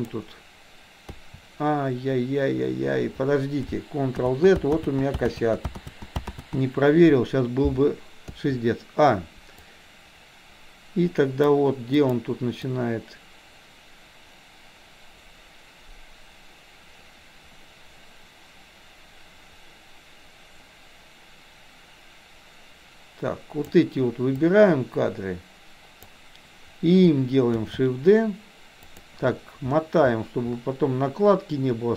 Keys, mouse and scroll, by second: 1.1 a, 4.2 ctrl+z, 5.1 ctrl+z, 5.6 ctrl+z, 6.2 ctrl+z, 8.3 ctrl+z, 8.3 a, 9.6-11.6 drag, 12.1 click, 12.6-23.8 drag, 24.3-26.1 drag, 27.6 shift+d.